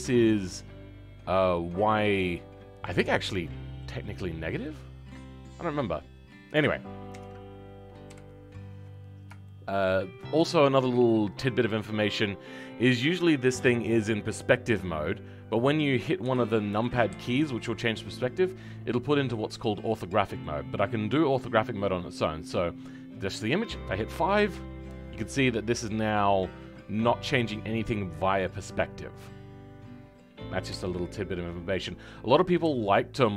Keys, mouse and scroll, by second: 3.2 middle click, 4.0 scroll down 1, 4.6-7.1 middle drag, 7.1 KP_1, 9.4 shift+middle click, 9.9-12.2 scroll down 1, 12.2-15.6 middle drag, 18.6-21.5 middle drag, 21.5-24.3 scroll up 1, 24.3-25.1 scroll up 1, 25.1-28.2 middle drag, 32.0-32.5 scroll up 1, 32.5-32.9 scroll up 1, 32.9-33.3 middle drag.